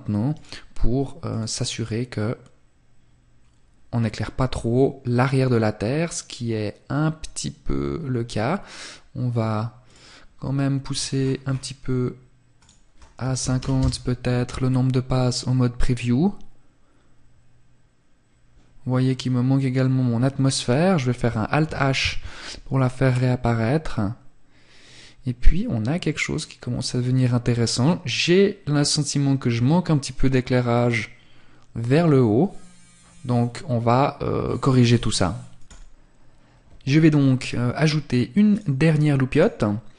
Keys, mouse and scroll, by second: 6.8 scroll up 1, 8.5 scroll up 1, 8.9 click, 10.0-10.3 scroll down 1, 11.0-11.6 scroll down 9, 11.6 click, 37.7 click, 39.7-39.9 scroll down 3.